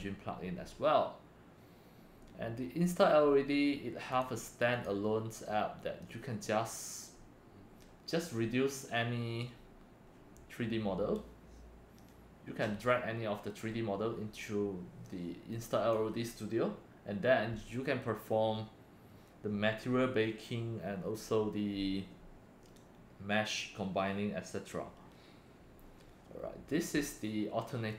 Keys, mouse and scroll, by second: 4.1 click, 4.7 click, 15.5-15.9 drag, 27.9 click.